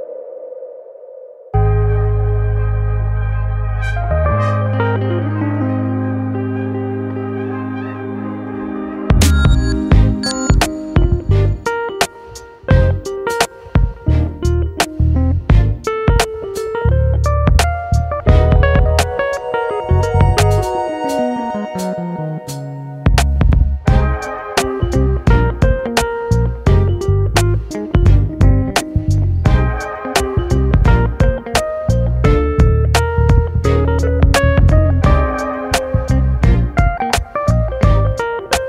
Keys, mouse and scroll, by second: 1.3-1.7 scroll down 1, 3.1-5.1 drag, 5.3-7.7 scroll down 7, 8.2-10.3 drag, 10.7-11.4 scroll down 1, 13.1-14.6 scroll down 5, 14.6-16.6 drag, 17.2-19.0 drag, 19.0 scroll up 2, 20.9-27.6 drag, 27.8-29.7 scroll down 1, 30.3-31.0 scroll up 1, 31.0-33.0 drag, 34.5-36.8 scroll down 4, 36.8 scroll down 2, 37.4-38.6 drag.